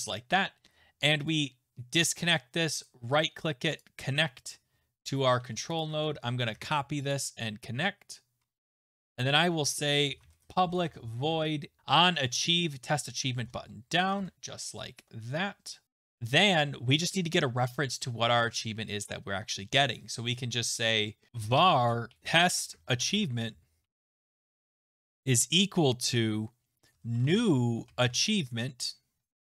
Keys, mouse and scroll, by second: 1.3 click, 2.0 right click, 2.0 click, 2.8 right click, 3.9 click, 5.1 click, 5.8 click, 5.9 ctrl+a, 6.5 ctrl+c, 7.1 click, 8.4-9.2 scroll down 5, 9.2 click, 9.7 Return, 9.8-11.3 typing, 10.2 middle click, 13.2-15.8 typing, 15.8 Return, 18.5 Return, 21.1-29.4 typing.